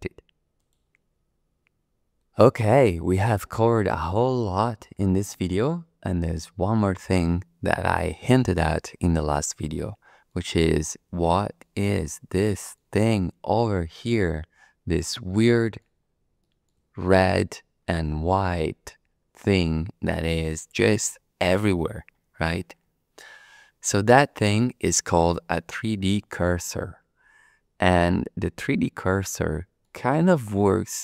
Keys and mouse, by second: 0.6-1.9 drag, 9.7 shift+click, 10.2 shift+middle click, 11.2 shift+click, 12.5 shift+click, 14.1-15.8 shift+middle drag, 16.4 middle click, 17.0 shift+middle click, 29.2 shift+click, 29.3 shift+middle click, 29.3 shift+click, 29.5 shift+middle click, 30.7 click, 30.8-31.0 middle drag.